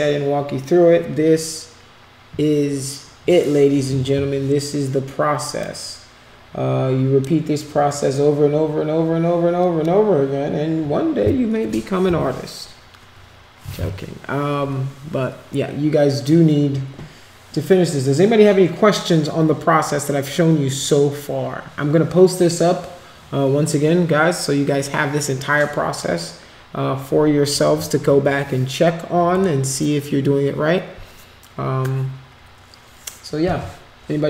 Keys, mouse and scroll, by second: 5.6-7.2 drag.